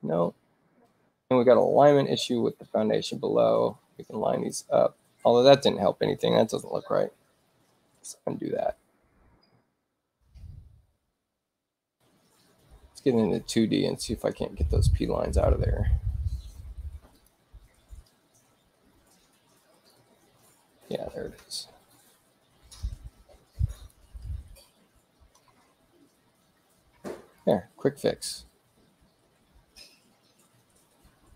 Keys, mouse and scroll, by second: 1.6 click, 4.3 click, 8.0 ctrl+z, 11.7 click, 15.1 space, 17.1 click, 18.0 Return, 23.7 click, 24.2 Return, 25.6 x, 27.3 click.